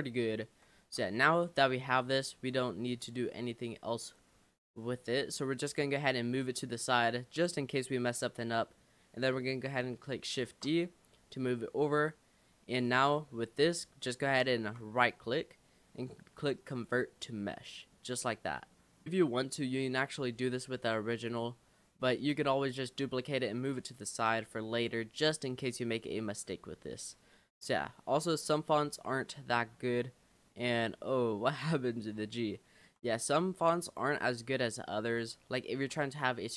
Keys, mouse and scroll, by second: 0.0 Tab, 0.8 Tab, 1.2-2.6 middle drag, 2.6-3.0 scroll down 2, 3.0 Tab, 4.2-5.2 scroll down 6, 5.2-6.4 middle drag, 6.4 click, 10.5 shift+d, 11.5 click, 13.0-14.3 scroll up 8, 14.4-15.0 shift+middle drag, 15.0-17.3 right drag, 17.3-18.0 middle drag, 18.0 scroll up 1, 18.2 click, 18.6 scroll down 2, 18.7-19.1 middle drag, 19.1 click, 19.7-20.3 middle drag, 20.3-21.0 scroll down 5, 21.3 click, 22.1 click, 23.1-23.4 middle drag, 23.4 scroll down 2, 24.5 click, 25.7 click, 26.0-26.3 scroll up 4, 26.4-26.9 middle drag, 26.9-27.4 scroll up 2, 27.4 Tab, 28.2 middle click, 28.5-29.3 scroll up 7, 29.3-31.0 middle drag, 31.0-31.7 scroll up 6, 32.0-32.3 scroll down 4, 32.6 shift+middle click, 33.3-33.7 scroll down 3, 34.1-35.0 scroll up 6, 35.6 shift+middle click, 36.4-36.5 scroll down 1.